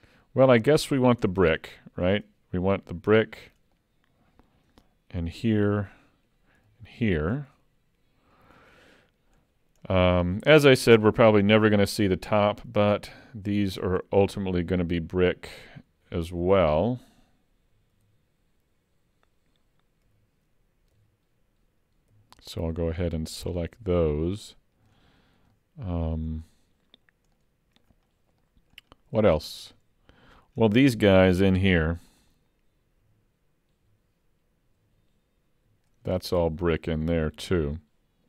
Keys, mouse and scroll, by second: 1.2 Tab, 1.6 middle click, 3.1 l, 3.8 middle click, 5.4 l, 5.8 middle click, 6.6 l, 7.3-8.2 scroll down 3, 8.7 middle click, 9.6-9.9 scroll up 2, 9.9 middle click, 11.5 l, 12.7 l, 13.8 click, 14.1 l, 16.3 ctrl+z, 18.0 ctrl+z, 20.1 l, 21.0 l, 22.1 l, 22.8 l, 23.8 l, 24.9 l, 25.3 scroll down 2, 25.5 middle click, 27.0 scroll up 1, 27.4 middle click, 28.1 scroll up 4, 28.4 middle click, 28.9-29.2 scroll up 4, 29.3 shift+middle click, 29.8 middle click, 33.0 l, 33.9 l, 34.8 l, 35.7 l, 36.1 middle click, 37.8 shift+middle click.